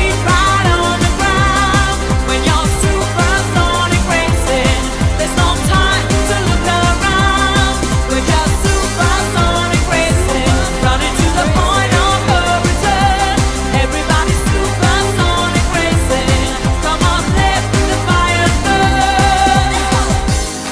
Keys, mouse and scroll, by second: 0.0 click, 6.6 t, 10.0 click, 12.5 click.